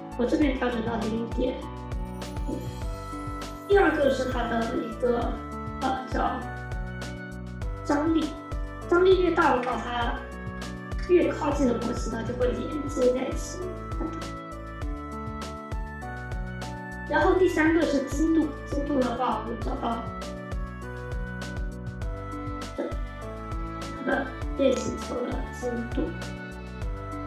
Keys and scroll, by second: 15.5 F4.